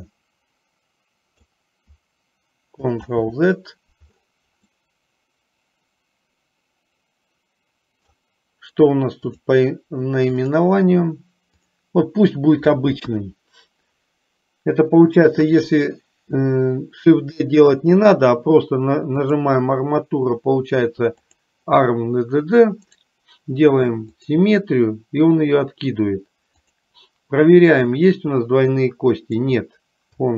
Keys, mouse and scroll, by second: 0.2-1.6 drag, 3.2 ctrl+z, 5.0-8.3 middle drag, 10.6 click, 13.2 KP_1, 19.3-21.7 drag, 26.7 click, 28.5-29.5 drag.